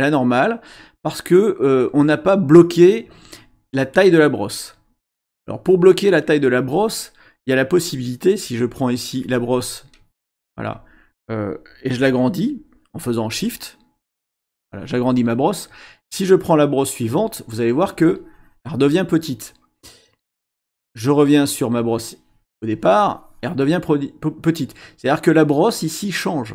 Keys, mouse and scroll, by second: 8.6-10.8 drag, 13.3-14.3 shift+drag, 14.4 shift+click, 17.1 click, 17.9 click, 21.8 click, 22.7 click.